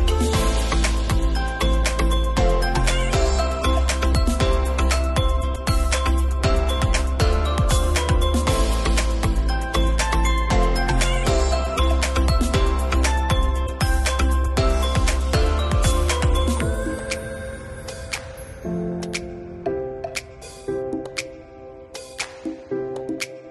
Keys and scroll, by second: 3.3 shift+), 5.0 super+Left, 5.3 shift+9, 5.7 alt+Right, 12.9 super+k, 16.2 alt+{, 16.4 shift+i, 19.8 alt+shift+Left, 22.5 super+k.